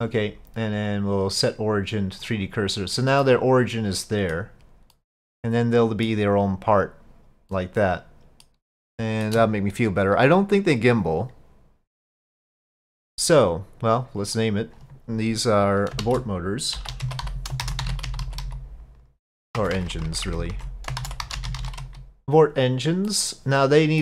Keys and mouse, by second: 1.0-2.3 drag, 3.3-4.4 middle drag, 4.9-6.1 middle drag, 7.6-8.5 middle drag, 8.9-9.3 shift+middle drag, 14.3-22.2 drag, 19.8 BackSpace, 19.9 BackSpace, 20.3 BackSpace, 23.1 middle click.